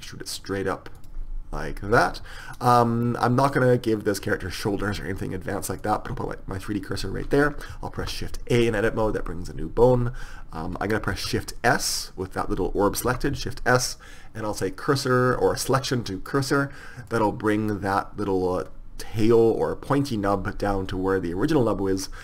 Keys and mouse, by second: 2.6-4.6 right drag, 5.9-7.8 drag, 8.1 shift+a, 11.2 shift+s, 13.2 shift+s.